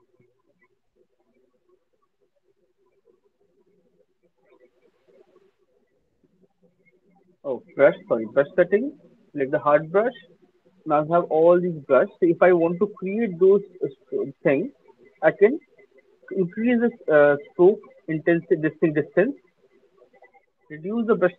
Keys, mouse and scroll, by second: 0.4 click, 1.2 click, 2.0 click, 2.4 click, 3.0 click, 5.9 click, 7.5 click, 9.6 click, 11.8-12.4 scroll, 17.7 click, 20.3 alt+click.